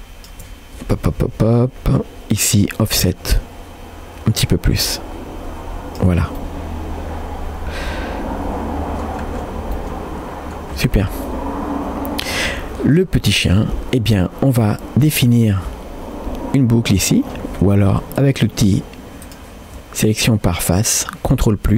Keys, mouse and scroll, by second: 2.0 scroll down 1, 3.0-6.1 shift+drag, 6.5-9.2 middle drag, 9.2 scroll down 2, 9.8 middle click, 9.8-10.6 scroll down 1, 10.7-11.1 scroll down 2, 11.3-12.4 middle drag, 12.5 scroll up 2, 12.9 click, 13.5 Tab, 14.8 shift+middle click, 15.3-15.6 scroll up 1, 16.9 alt+click, 18.2 click, 19.3 alt+click.